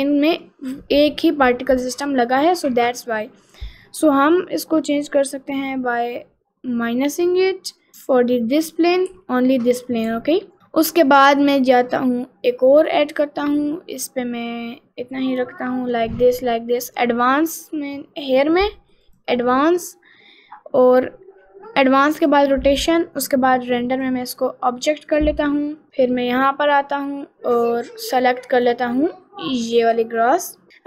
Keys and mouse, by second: 6.8 click, 7.9 middle click, 8.6 middle click, 9.2 s, 10.1 g, 12.9 click, 18.3 click, 19.1 click, 22.2 click, 24.0-25.3 drag, 25.9 middle click, 26.2 middle click, 28.6 click.